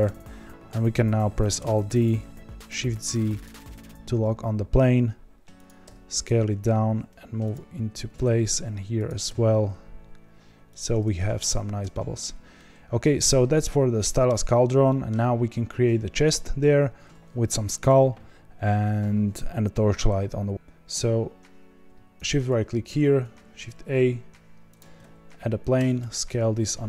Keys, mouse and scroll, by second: 1.5 alt+d, 3.6 s, 5.8 g, 7.9 alt+d, 9.2 s, 11.0 scroll down 2, 11.4 click, 11.9-14.3 shift+middle drag, 14.3 scroll down 1, 14.8-20.5 middle drag, 20.5-24.7 shift+right drag, 24.7 shift+a, 25.7 Tab, 26.0 s.